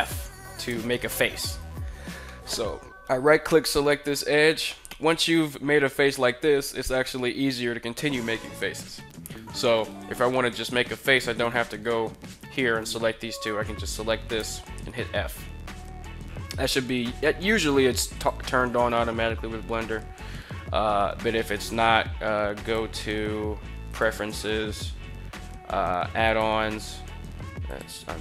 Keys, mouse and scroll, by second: 1.3 right click, 2.0 middle click, 8.0 middle click, 11.1 right click, 12.0 shift+right click, 13.1 right click, 14.2 f, 17.3 ctrl+r, 18.5 right click, 22.3-23.9 drag.